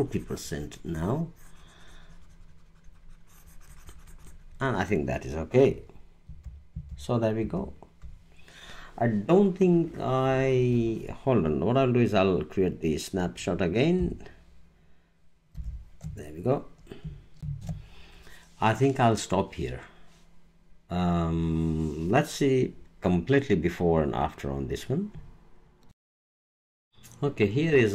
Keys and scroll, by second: 6.2 super+-, 15.5 alt+shift+super+e, 17.4 alt+space, 25.9 alt+space.